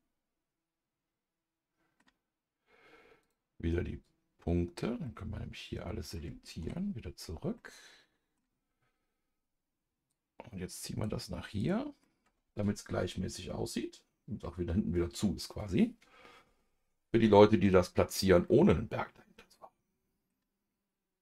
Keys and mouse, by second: 3.2-4.7 drag, 5.0-6.1 middle drag, 6.6 KP_Divide, 7.5 middle click, 10.1 click, 11.6 click, 12.0-17.7 middle drag, 18.4-20.3 middle drag.